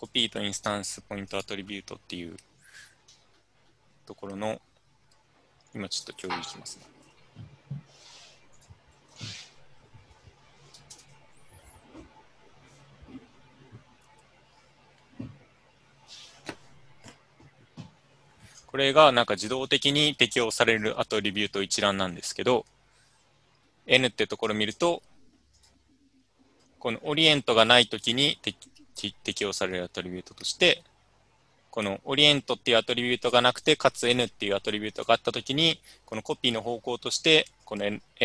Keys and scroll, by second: 6.9 ctrl+c, 9.1 ctrl+v, 10.9 ctrl+Return.